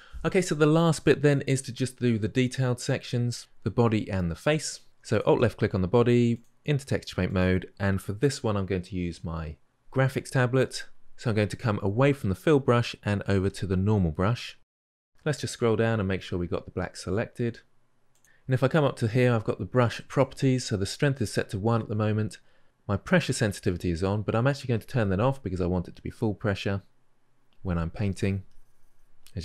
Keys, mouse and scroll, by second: 7.2-18.0 drag, 24.5 click, 27.9-29.4 drag.